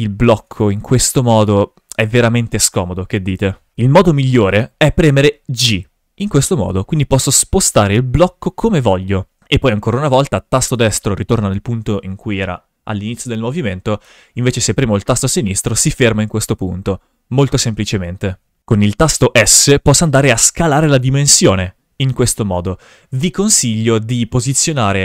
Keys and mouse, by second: 1.2 click, 2.2-2.7 drag, 3.7 shift+f, 5.7 g, 10.6 right click, 14.0 g, 15.4 click, 16.7 shift+f, 19.2 s, 22.5 right click.